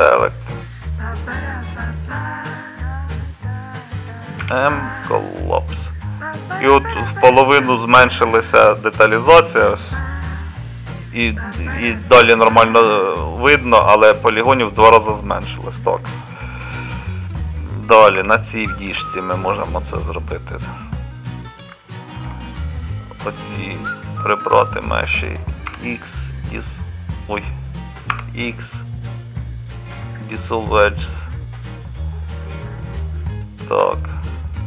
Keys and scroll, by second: 4.4 m, 14.9 Tab, 18.2 Tab, 25.7 x, 28.1 x.